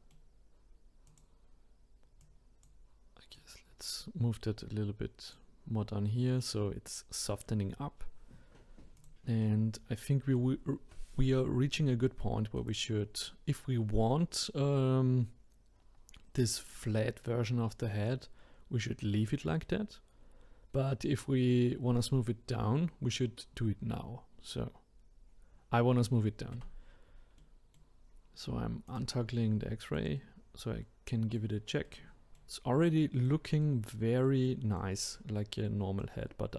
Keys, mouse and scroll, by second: 1.1 click, 2.2-3.4 drag, 8.0-8.6 scroll down 1, 8.6 scroll up 2, 9.0 click, 9.4-12.5 middle drag, 12.6 click, 19.6-26.6 middle drag, 26.6 Tab, 27.4-28.9 middle drag, 28.9 click, 29.3-36.5 middle drag.